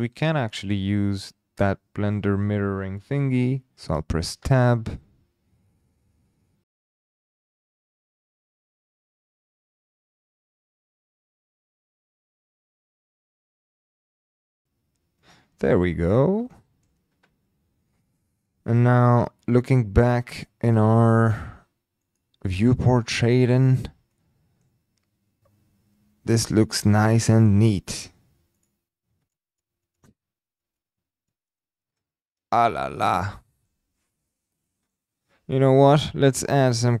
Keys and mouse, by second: 2.1 middle drag, 3.2 KP_7, 4.4 Tab, 5.7 click, 6.9-10.4 typing, 7.2 click, 7.5 click, 8.1 click, 9.5 click, 10.0 click, 11.0 shift+middle click, 11.7 shift+middle click, 12.0 g, 12.0 x, 12.3 click, 12.6 g, 12.7 x, 13.1 click, 13.4 shift+middle click, 13.8 1, 13.9 click, 14.2 g, 14.3 x, 15.2 click, 16.5 shift+middle click, 17.2 Tab, 18.0 shift+middle drag, 21.0-23.5 drag, 24.1-24.6 middle drag, 28.5 click, 30.5 drag, 31.4 middle drag, 31.8 middle click, 33.3-33.7 middle drag, 34.3 shift+drag, 34.6 middle drag, 36.5 click, 36.9-37.0 shift+drag.